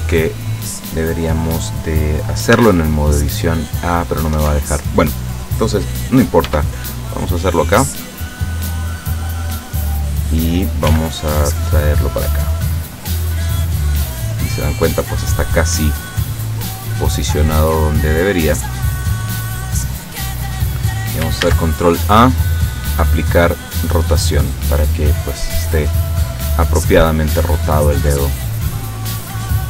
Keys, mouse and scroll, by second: 2.6 Tab, 4.4 Tab, 6.5 r, 9.5 click, 10.9 g, 13.5 click, 13.9-15.8 middle drag, 16.6 click, 18.3 click, 19.9-21.2 middle drag, 21.5 ctrl+a, 23.4 click, 24.5-26.0 drag, 26.1 scroll down 1, 26.6-29.6 middle drag.